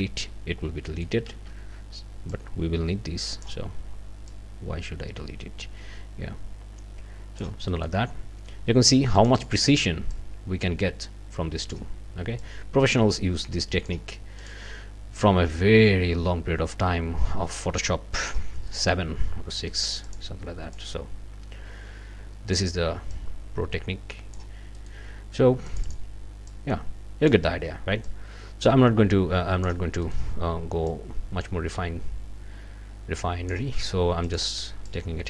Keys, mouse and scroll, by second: 0.9 ctrl+click, 1.3 ctrl+z, 2.3-3.6 drag, 4.3-7.6 drag, 7.7 middle click, 9.2 click, 10.1-11.9 drag, 12.4-14.0 drag, 14.4 click, 15.2-18.5 drag, 18.7 click, 19.8 click, 20.7-22.7 drag, 23.1-24.5 drag, 24.8 click, 25.7 click, 26.5-27.5 drag, 28.0-29.8 drag, 30.0 click, 30.9-33.7 drag, 34.2 click, 34.9-35.2 drag.